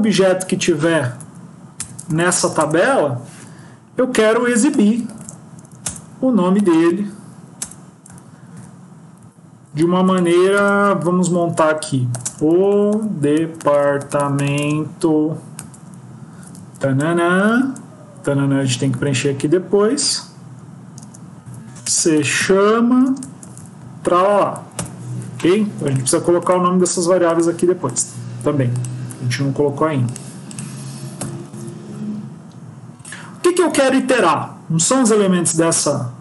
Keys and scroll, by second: 5.7 Return, 7.5 Return, 9.7 Left, 10.7 Right, 17.3 Left, 18.8 Right, 31.5 ctrl+s.